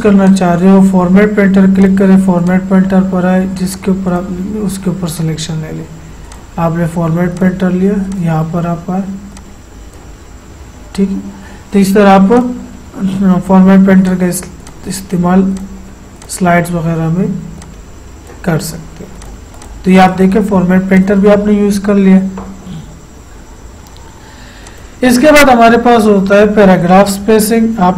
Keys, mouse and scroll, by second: 24.7-27.9 drag.